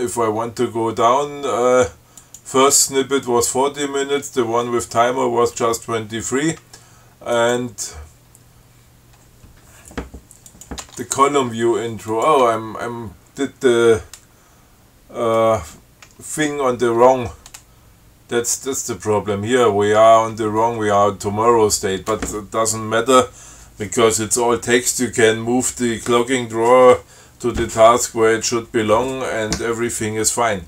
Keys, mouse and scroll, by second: 0.1 Tab, 0.1 click, 2.5 click, 7.6 click, 10.7 click, 11.1 Tab, 12.4 click, 12.7 Tab.